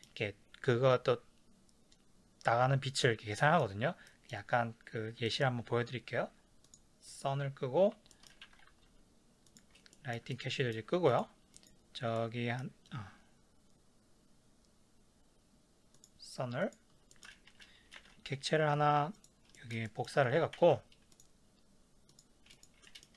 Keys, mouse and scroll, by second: 6.6 click, 7.1 click, 8.1-9.6 shift+middle drag, 8.5 ctrl+s, 9.6 click, 9.9-11.2 ctrl+middle drag, 11.5 click, 12.2-16.0 middle drag, 16.0 click, 16.6 click, 17.1-19.1 shift+middle drag, 19.0 shift+a, 19.1 click, 19.6-22.2 ctrl+shift+middle drag, 21.2 z, 22.2 click, 22.9 middle click.